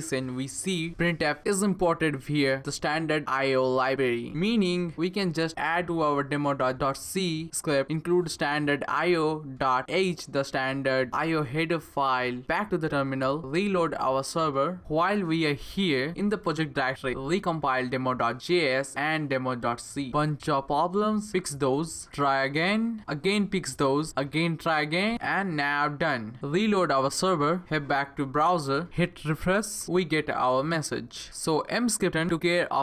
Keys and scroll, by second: 0.9 typing, 1.6 Left, 3.1-3.9 typing, 5.3-7.7 typing, 13.9 Up, 14.2 Return, 17.7 BackSpace, 17.8 BackSpace, 18.6 Up, 18.8 Return, 21.1-22.0 typing, 21.5 Right, 21.8 Left, 23.1 Up, 23.3 Return, 24.5 Left, 24.7 BackSpace, 25.6 Up, 25.9 Return, 27.2 ctrl+c, 27.5 Up, 27.7 Return.